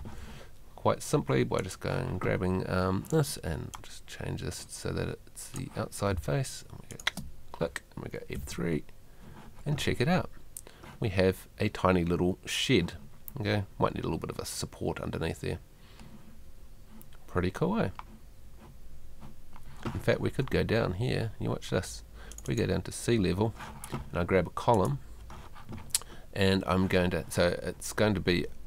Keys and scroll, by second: 0.0 Escape, 6.1 space, 8.4 F3, 9.8 Escape.